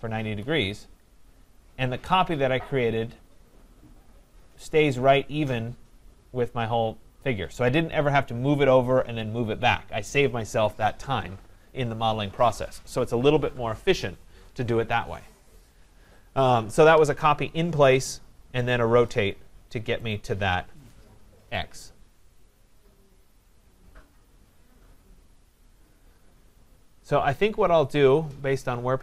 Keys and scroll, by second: 0.3 Return.